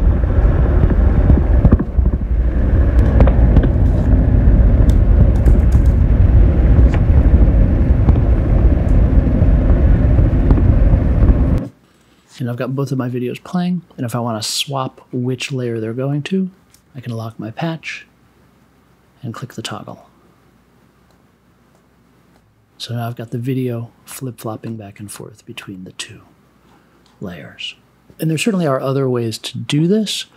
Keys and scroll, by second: 4.6-6.3 typing, 7.0 super+j.